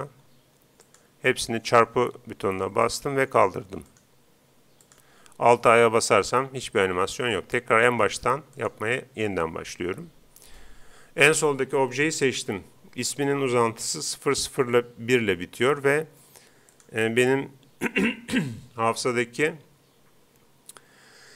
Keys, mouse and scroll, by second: 0.8-2.6 drag, 1.8-3.4 right drag, 2.9-4.6 drag, 3.9-5.6 right drag, 4.8-6.5 drag, 6.1 alt+a, 7.2 Escape, 8.6-10.3 right drag, 16.7-18.3 drag.